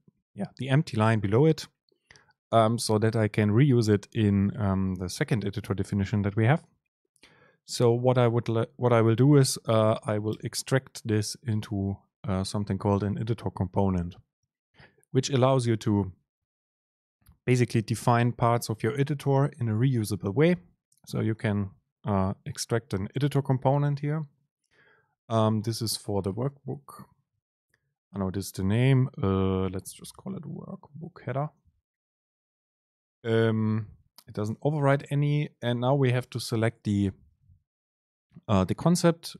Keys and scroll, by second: 26.0 super+space, 33.0 Down, 35.3 Down, 35.4 super+space.